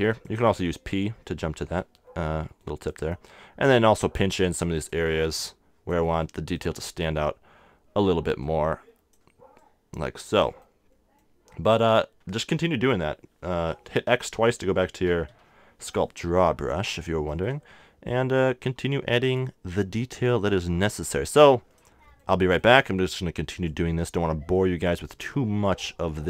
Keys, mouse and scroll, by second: 1.0 p, 2.0 middle click, 3.6-6.2 drag, 8.4-10.6 drag, 11.2 click, 11.6-14.1 middle drag, 14.1 x, 14.3 x, 15.1 x, 15.3 x, 16.0 middle click, 18.4-22.8 drag, 23.7-26.2 drag.